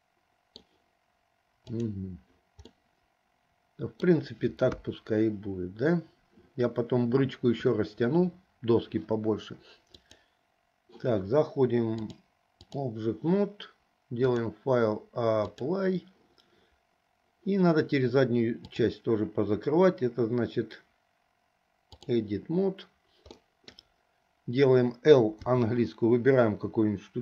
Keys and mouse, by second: 1.8 click, 2.9-4.2 middle drag, 4.8 KP_1, 10.1 click, 12.2 click, 14.3-15.8 drag, 18.7-22.3 drag, 23.5 middle click, 25.6 l.